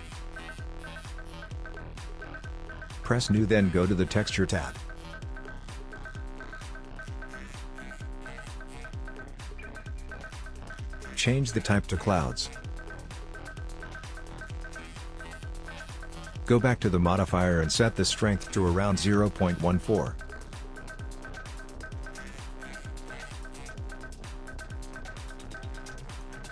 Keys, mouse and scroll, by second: 4.9 click, 7.9 click, 11.1 click, 15.9 click, 18.1 shift+click, 21.6 middle click, 23.5 click, 24.2 middle click.